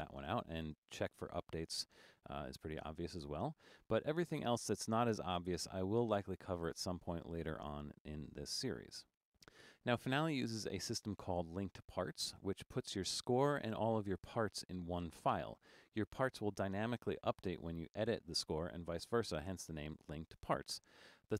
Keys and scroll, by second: 18.1 9, 19.4 9.